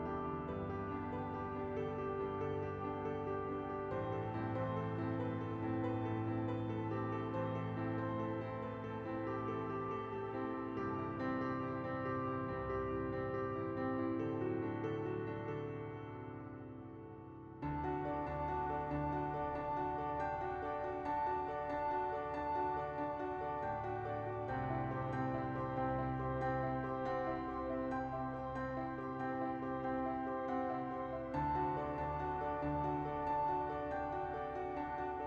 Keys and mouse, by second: 0.3 middle click, 0.8 KP_1, 2.2 KP_Decimal, 2.3 click, 2.3 right click, 2.8 KP_Decimal, 3.2 click, 3.5 click, 5.1 click, 5.4 click, 6.0 KP_1, 6.8 KP_1, 6.9 shift+middle click, 8.6 alt+shift+KP_0, 9.2 ctrl+alt+KP_0, 10.9 middle click, 11.7 middle click, 12.0 middle click, 12.0 KP_Decimal, 12.9 n, 13.3 KP_0, 13.7 middle click, 15.4-16.5 middle drag, 16.7 middle click, 18.0 middle click, 20.1-21.3 shift+drag, 21.7 shift+middle click, 22.3 middle click, 28.4 click, 31.5-33.3 drag, 33.8 click, 35.0 click.